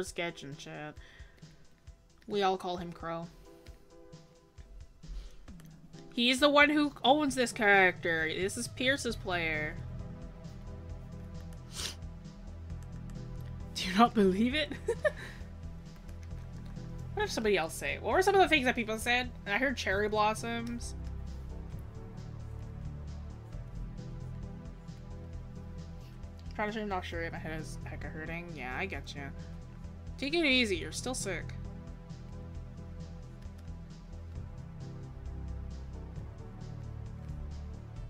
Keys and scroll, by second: 16.1 scroll down 1, 16.5 scroll up 1, 17.2-17.6 scroll.